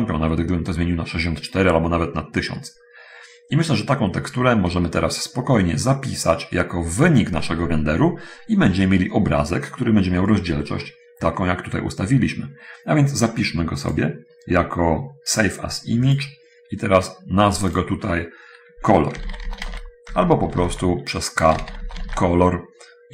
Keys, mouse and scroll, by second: 4.5-4.8 scroll up 1, 5.7 middle click, 10.5-11.2 scroll up 1, 14.1 click, 16.4 click, 18.1 click, 19.5-20.4 typing, 21.7-23.1 typing.